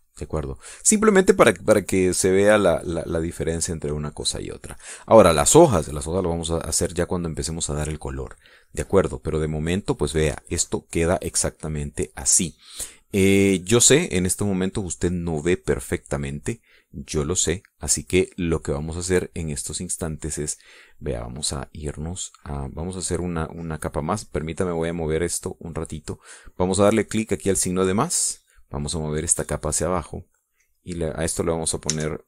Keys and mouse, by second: 1.2 click, 1.8 middle click, 2.2 click, 3.4-5.0 drag, 5.2 click, 6.1 click, 8.5 click, 9.0 click, 13.0 click, 19.9-21.0 drag, 25.6-27.4 drag, 29.4 click, 30.3-31.6 drag, 32.0 click.